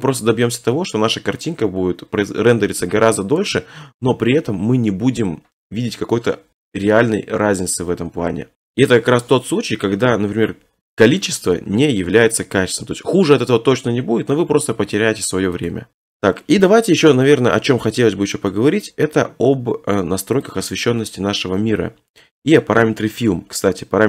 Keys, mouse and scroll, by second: 0.4 middle click, 0.5 middle click, 0.8 middle click, 1.3 middle click, 1.5 middle click, 2.9 middle click, 3.0 middle click, 3.7 middle click, 4.0 middle click, 4.4 middle click, 4.6 middle click, 8.5 middle click, 15.7-16.2 drag, 17.2 middle click, 17.2 scroll, 17.2 scroll, 17.3 scroll, 21.4 click, 22.7 middle click, 22.8 middle click, 23.6 middle click, 23.7 middle click.